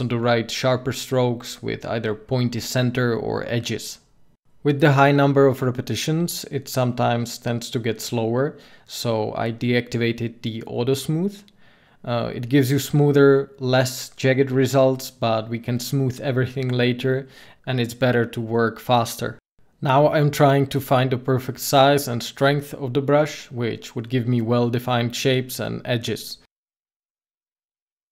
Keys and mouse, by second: 2.3 ctrl+z, 3.9 f, 5.5-6.8 drag, 12.2-17.5 drag, 12.8 ctrl+z, 17.7 ctrl+z, 18.4-22.9 drag, 25.1 ctrl+z.